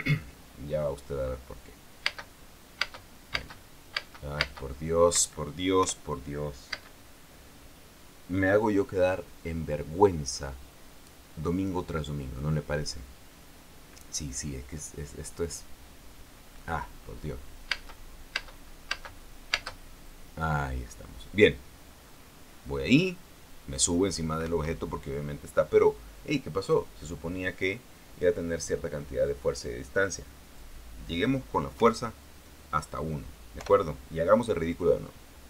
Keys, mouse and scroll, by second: 2.8 space, 3.5 space, 5.9 Escape, 6.5 p, 7.4 space, 18.4 space, 25.1 Escape, 30.8 click, 32.5 p, 34.3 p.